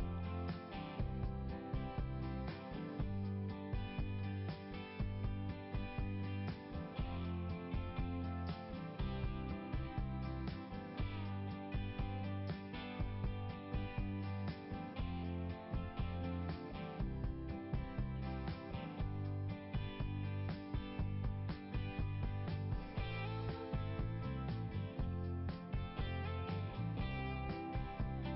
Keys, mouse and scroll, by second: 0.1 scroll up 1, 2.6 click, 2.8 click, 5.6 click, 5.9 click, 6.2 click, 8.2 click, 9.0 click, 9.2 click, 10.4-11.1 scroll up 1, 20.4-21.0 scroll down 1, 21.7 scroll down 1.